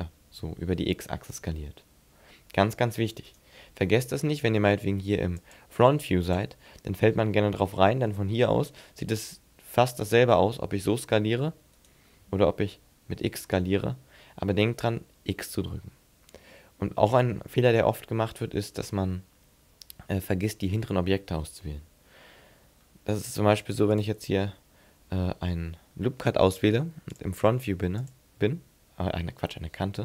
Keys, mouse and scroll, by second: 3.4 right click, 8.6 s, 11.8 right click, 12.2 s, 18.7 click, 20.5 middle click, 23.9 click, 27.1 click, 28.1 click.